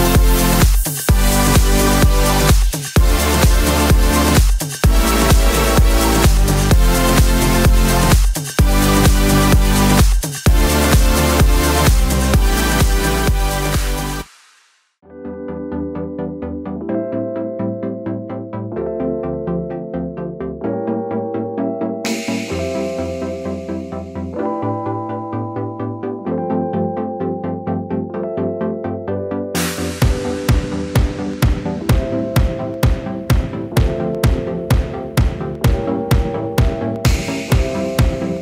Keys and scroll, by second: 6.8 super+c, 7.0 super+v, 15.5 Page_Up, 15.6 Page_Up, 24.0 i.